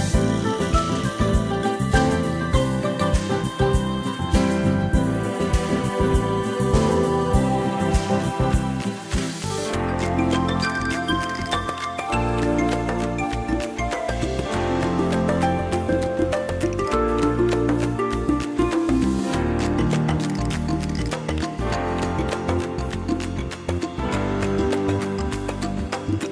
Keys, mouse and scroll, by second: 7.9-8.2 scroll up 1, 9.6 ctrl+scroll up 1, 11.2 click, 11.5 ctrl+scroll down 1, 13.4 click, 14.7 ctrl+scroll down 1, 16.5 click, 22.3 ctrl+scroll up 1, 23.2 click, 25.2 click.